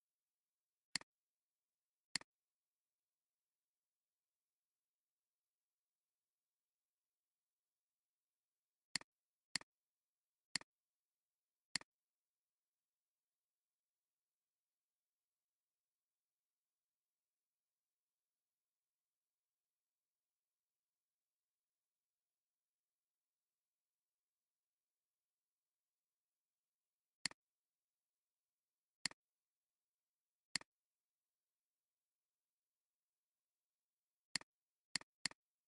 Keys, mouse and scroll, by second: 10.5 shift+click, 30.5 click, 31.3 alt+scroll up 1, 33.7 alt+scroll down 1, 34.3 alt+scroll down 1, 35.1 space, 35.2 double click.